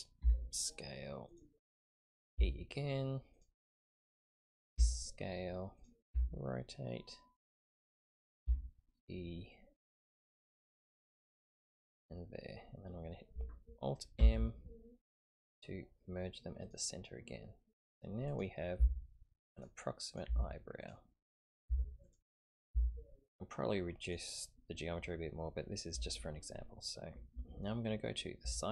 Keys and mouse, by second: 0.2 s, 2.3 e, 4.7 s, 6.1 r, 8.4 e, 14.2 alt+m, 18.7 g, 20.8 g, 21.5 click, 21.6 g, 22.6 click, 22.7 g, 28.4 KP_1.